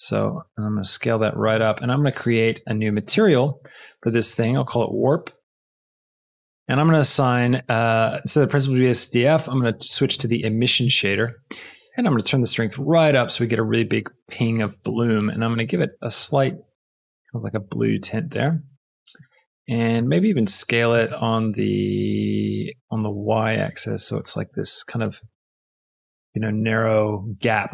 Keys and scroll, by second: 0.4 s, 4.6 shift+w, 5.0 r, 5.7 p, 20.2 x, 20.9 Escape, 21.5 s, 22.8 y, 25.1 s, 25.3 z.